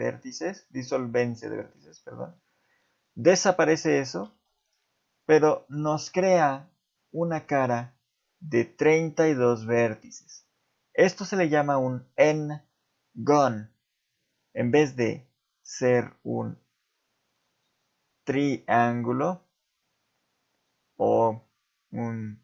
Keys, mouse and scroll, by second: 1.6 shift+middle click, 2.2 z, 4.3 ctrl+Tab, 5.7 click.